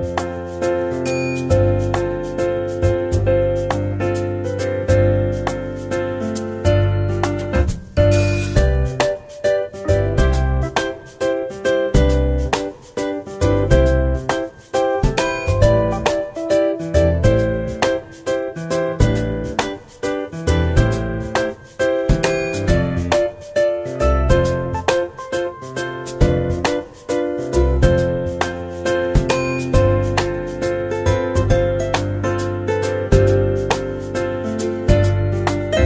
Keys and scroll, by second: 1.0 Tab, 5.1-6.0 typing, 21.0 Tab, 25.9 ctrl+z, 27.5 ctrl+z, 35.3 ctrl+z, 35.7 ctrl+z.